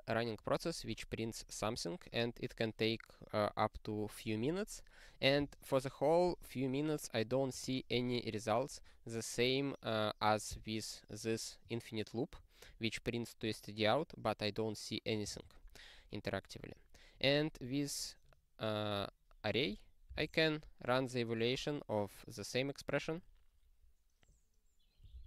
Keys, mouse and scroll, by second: 6.3-6.7 scroll up 1, 6.7-7.5 scroll, 7.5 click, 15.3-17.1 scroll, 17.1 click, 25.0 ctrl+e.